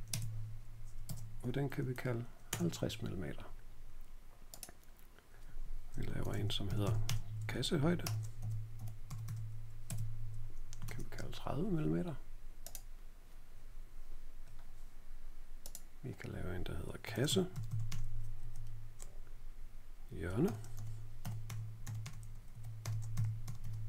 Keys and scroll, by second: 0.1 Tab, 1.0 shift+Tab, 1.6-3.1 typing, 5.8-11.2 typing, 9.8 Tab, 16.7-18.3 typing, 20.2-23.8 typing.